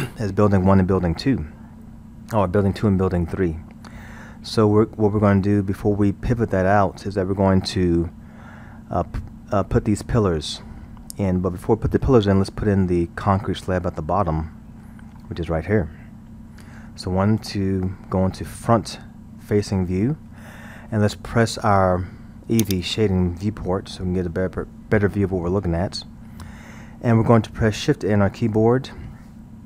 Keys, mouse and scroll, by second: 14.2-14.8 scroll, 14.8-16.4 middle drag, 16.4-16.9 scroll, 17.8 KP_1, 22.6 click, 26.2-27.6 scroll, 28.4 shift+a.